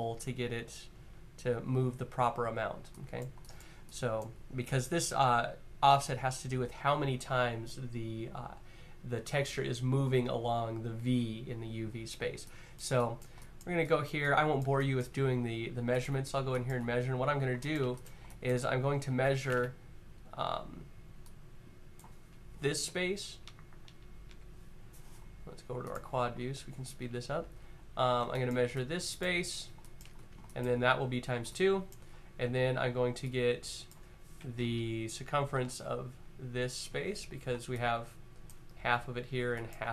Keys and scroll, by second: 22.5 Up, 22.9 Up, 23.8 Up, 25.5 Up, 34.4-35.5 Up, 36.5 Up.